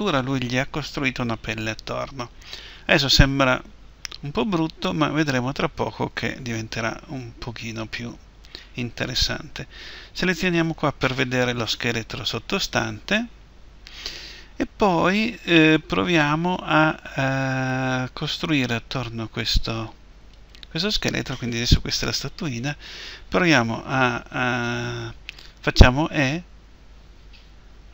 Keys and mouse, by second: 20.3-25.8 right drag, 25.8 e.